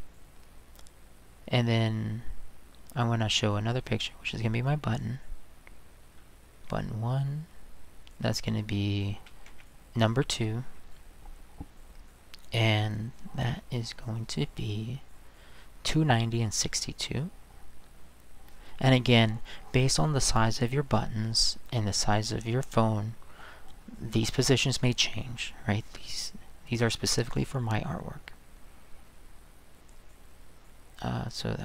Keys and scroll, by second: 9.2-10.0 typing.